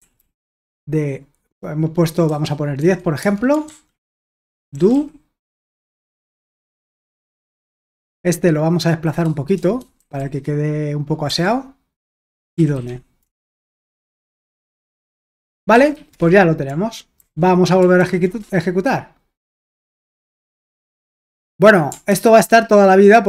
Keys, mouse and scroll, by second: 0.0-0.7 typing, 2.2-8.3 typing, 7.4 Escape, 10.0 typing, 11.2-17.7 typing, 18.0 ctrl+p, 18.4 Return, 22.1 ctrl+c.